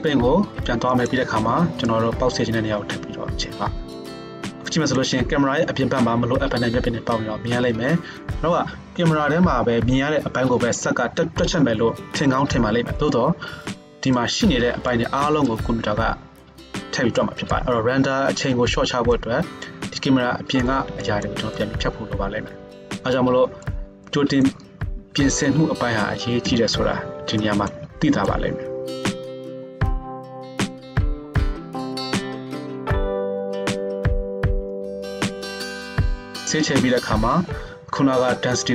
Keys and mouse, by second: 1.9-38.7 drag, 26.4 KP_0, 35.2 KP_0, 36.4 ctrl+Tab.